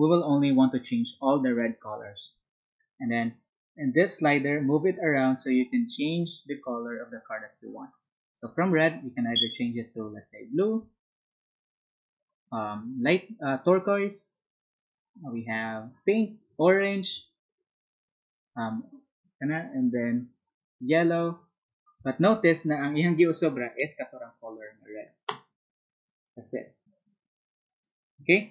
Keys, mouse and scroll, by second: 4.3-22.3 ctrl+drag, 26.2-27.7 ctrl+drag.